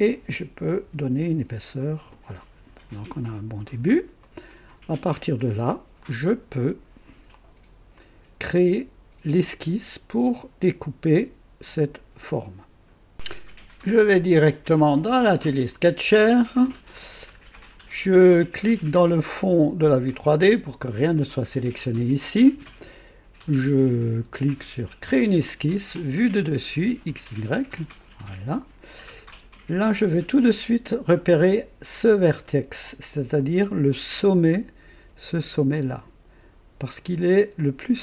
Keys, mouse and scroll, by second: 0.8 KP_4, 2.0 KP_Enter, 3.2 click, 4.2 right click, 5.0 click, 6.0 click, 7.3 click, 7.9 right click, 14.3-15.8 drag, 19.8 click, 25.0 click, 27.6 click, 29.2-29.5 scroll up 1, 29.8 right click, 33.9-35.1 drag, 37.5 click.